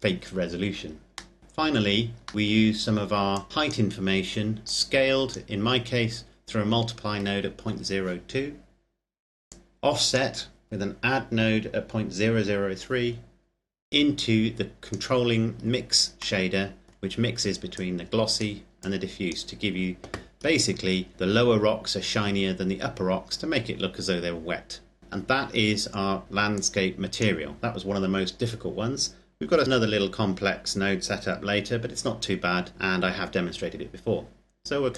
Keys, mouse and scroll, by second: 0.8 click, 1.1 middle click, 1.4-2.2 scroll down 1, 2.2 middle click, 2.3-3.1 scroll up 1, 3.1 click, 5.4-7.4 scroll up 1, 9.2 click, 14.2 click, 15.3-16.1 scroll down 2, 16.4 middle click, 17.7-18.4 drag, 18.8 click, 20.2-21.6 scroll down 2, 22.0-23.8 scroll up 1, 25.0 click, 26.6 click, 29.6-31.5 scroll down 1, 34.6 click.